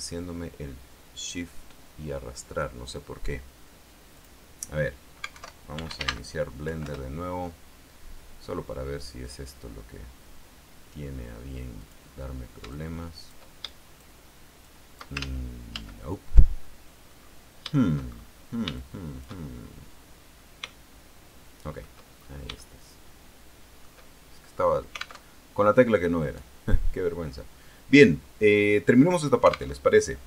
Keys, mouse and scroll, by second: 4.4 click, 5.5 alt+F2, 5.9 alt+b, 6.1 alt+l, 6.8 End, 7.0 Return, 9.4 click, 12.0 click, 12.9 shift+click, 13.8 shift+click, 14.8 shift+click, 15.4 ctrl+shift+z, 17.3-17.6 scroll down 2, 18.2-19.0 shift+scroll up 4, 19.0 shift+click, 20.8-22.2 shift+middle drag, 22.4-22.7 shift+scroll up 3, 22.7-24.2 shift+middle drag, 25.4 alt+Tab, 29.9 alt+Tab.